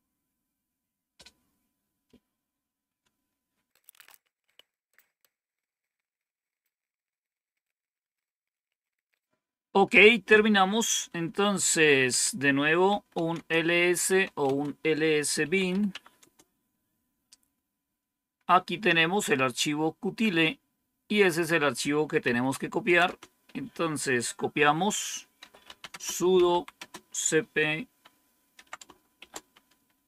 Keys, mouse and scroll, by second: 11.5 typing, 12.8-16.1 typing, 13.2 Return, 21.9-22.8 typing, 25.0-26.9 typing, 28.4-29.1 typing.